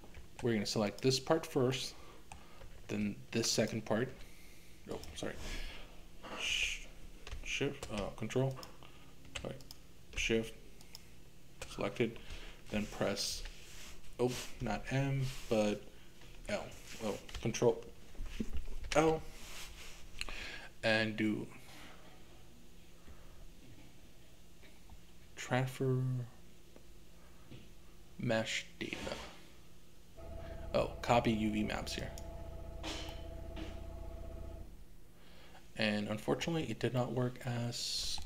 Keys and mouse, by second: 0.8 click, 1.8 middle click, 3.6 ctrl+click, 4.9 click, 8.5 ctrl+click, 10.8 shift+click, 13.3 m, 16.3 l, 18.8 l, 33.1-36.5 middle drag, 37.0-38.2 middle drag.